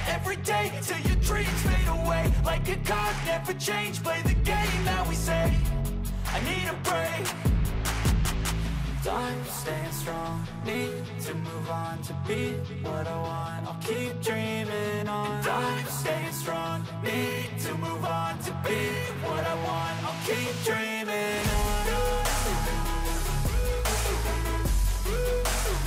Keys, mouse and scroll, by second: 0.9 double click, 0.9 BackSpace, 12.2 double click, 12.8-13.8 scroll up 14, 21.3 double click, 21.9-22.4 scroll down 3, 22.5-24.9 scroll up 3.